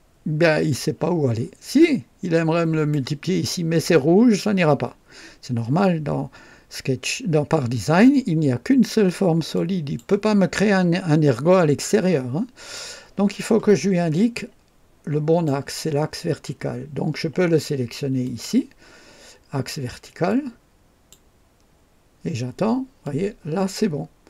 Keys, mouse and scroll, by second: 0.7-3.1 drag, 9.5 click, 11.9-12.9 drag, 14.3-15.6 drag, 18.2 click, 20.2 click, 23.0-24.2 drag.